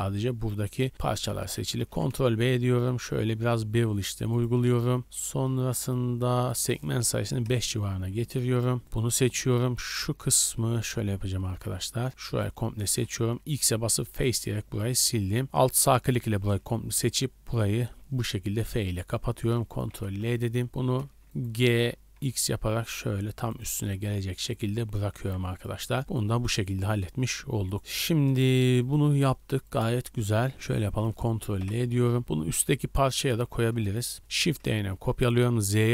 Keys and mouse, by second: 1.8 ctrl+b, 2.1 click, 4.4 shift+middle click, 5.0-8.5 drag, 8.9 click, 8.9 middle click, 8.9 right click, 10.6-13.2 typing, 15.2 1, 16.5 f, 19.9 ctrl+l, 21.0 click, 21.8 g, 22.1-23.3 drag, 23.7 middle click, 24.1-27.6 drag, 24.6 Tab, 25.0 a, 25.2 a, 26.9 Tab, 27.7-29.3 drag, 29.3-31.6 shift+middle drag, 31.6 ctrl+l, 32.2-34.5 middle drag, 34.5 shift+d.